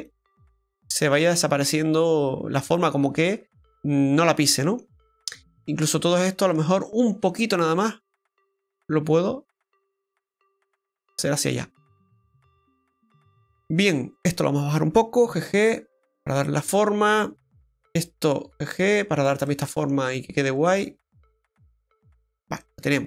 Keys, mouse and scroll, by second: 0.0 click, 1.6 middle click, 5.6 right click, 6.0 shift+right click, 6.8 shift+right click, 6.8 middle click, 7.7 click, 11.5 middle click, 12.3-12.6 scroll up 1, 14.2 right click, 15.2 g, 16.7 middle click, 18.1 right click, 18.4 g, 19.5 middle click, 20.6 right click, 20.8 g, 22.6 middle click, 22.6-23.0 scroll down 1.